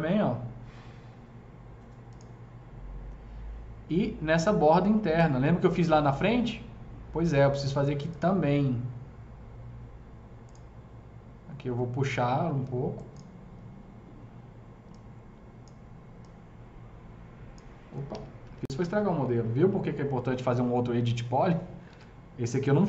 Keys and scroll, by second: 18.0 ctrl+z, 18.4 ctrl+z, 18.7 ctrl+z, 21.8 ctrl+z, 22.6 ctrl+z.